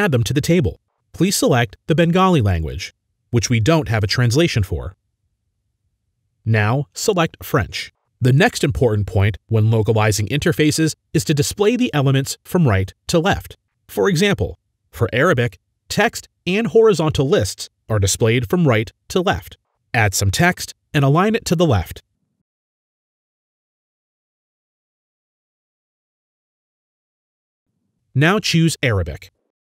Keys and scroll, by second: 0.0-0.4 typing, 4.9-5.8 typing, 21.2-21.6 typing, 23.0-24.8 typing.